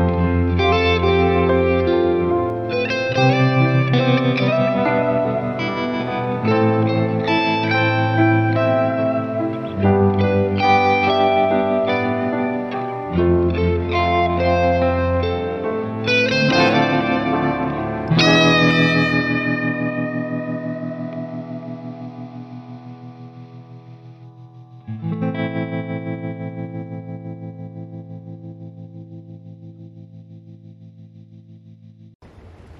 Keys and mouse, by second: 0.6 ctrl+z, 1.1 ctrl+z, 2.5 right click, 3.7 ctrl+z, 4.1 ctrl+z, 7.3 ctrl+z, 7.6 ctrl+z, 8.6 ctrl+z, 9.4 ctrl+z, 10.0 ctrl+z, 10.4 ctrl+z, 12.9 ctrl+z, 13.7 right click, 15.2 ctrl+z, 15.3 ctrl+z, 15.9 ctrl+z, 19.5 ctrl+z, 20.0 ctrl+z, 21.5 ctrl+z, 21.6 ctrl+z, 21.8 ctrl+z, 22.0 ctrl+z, 22.6 ctrl+z, 22.9 ctrl+z, 24.7 ctrl+z, 26.0 ctrl+z, 26.2 ctrl+z, 26.7 right click, 27.5 ctrl+z, 28.2 ctrl+z, 28.4 ctrl+z, 28.5 ctrl+z, 30.5 ctrl+z, 32.2 ctrl+z.